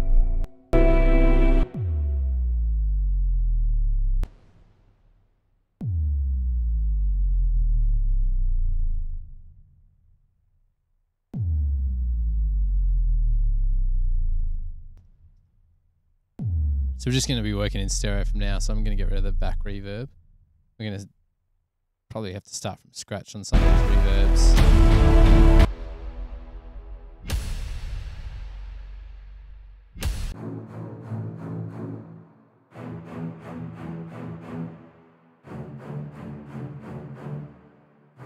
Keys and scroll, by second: 0.6 space, 0.8 space, 4.4 space, 4.8 space, 10.2 space, 10.4 space, 15.2 space, 15.5 space.